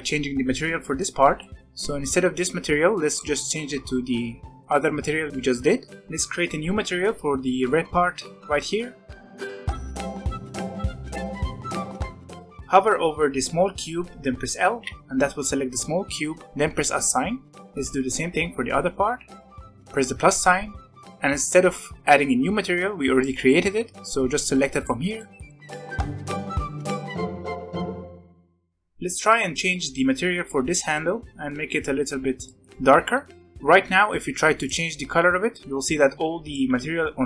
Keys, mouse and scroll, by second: 0.5 scroll up 1, 0.8 shift+middle click, 1.1 scroll up 1, 1.3-3.0 middle drag, 3.0 click, 5.9-8.6 shift+middle drag, 9.6-10.4 drag, 10.4 e, 11.6 Tab, 11.8 scroll up 2, 11.9 alt+a, 12.1-14.3 shift+middle drag, 14.7 l, 17.0 click, 17.5 shift+middle click, 19.6-21.9 drag, 23.1-25.1 drag, 25.1 shift+middle click, 25.4 scroll up 1, 25.6 Tab, 25.8 alt+a, 26.0 scroll up 1, 26.1 l, 26.9 click, 27.1 Tab, 27.2-28.1 scroll down 5, 27.3 shift+middle click, 27.6 shift+middle drag, 27.8 alt+a, 27.9 middle click, 28.1 shift+middle drag, 28.3 drag, 28.4-33.4 shift+middle drag, 34.6 click, 36.7 ctrl+z.